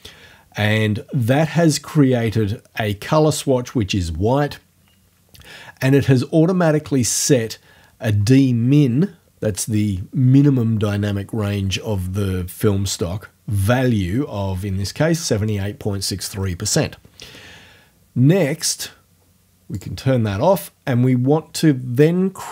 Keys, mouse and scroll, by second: 19.8 click.